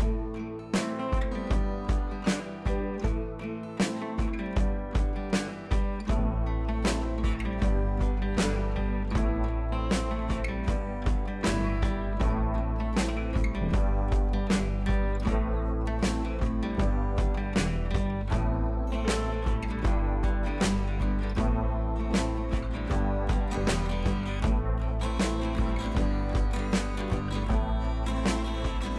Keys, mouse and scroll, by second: 8.8 ctrl+z, 9.5 click, 17.4-19.4 drag, 24.0-24.5 drag, 27.8-28.7 drag.